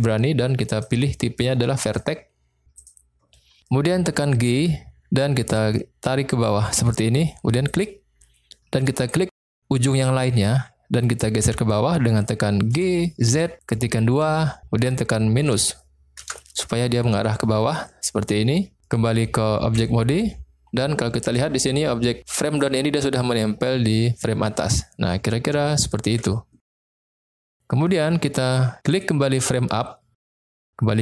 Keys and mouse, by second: 0.8-3.0 drag, 4.6 g, 7.6 click, 9.1 click, 12.7 g, 13.2 z, 14.1 2, 15.4 -, 16.1 Return, 19.6 Tab, 25.7 shift+middle click, 27.2-28.0 middle drag.